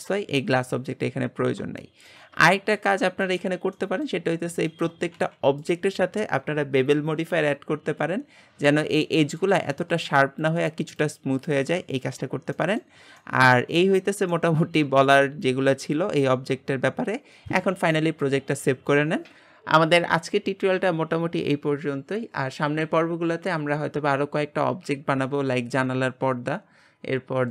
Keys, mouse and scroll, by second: 0.0-1.4 shift+middle drag, 1.4-1.8 scroll down 1, 1.8-3.3 shift+middle drag, 3.3 click, 3.7-4.2 middle drag, 4.2-4.7 scroll up 1, 4.7-5.1 shift+middle drag, 5.1 g, 8.6-9.0 scroll up 2, 9.0-12.0 shift+middle drag, 12.0 scroll down 3, 12.5-13.8 shift+middle drag, 13.8-14.5 scroll down 1, 14.5-27.5 shift+middle drag.